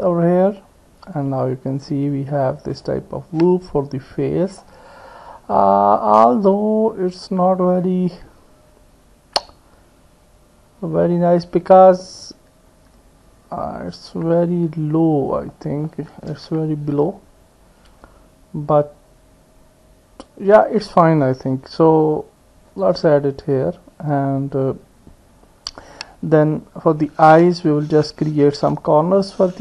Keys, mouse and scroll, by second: 1.7 click, 2.7 click, 2.9 middle click, 3.4 click, 3.9 middle click, 7.8-11.1 drag, 14.4-15.5 drag, 15.5 middle click, 16.5 KP_1, 22.7 click.